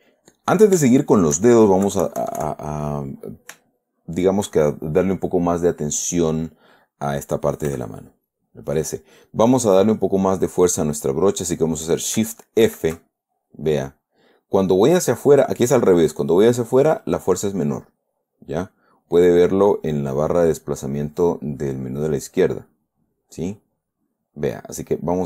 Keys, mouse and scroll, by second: 1.4 shift+middle click, 2.2 KP_Subtract, 3.1 middle click, 4.1 shift+middle click, 8.1 f, 8.7 click, 13.0 shift+f.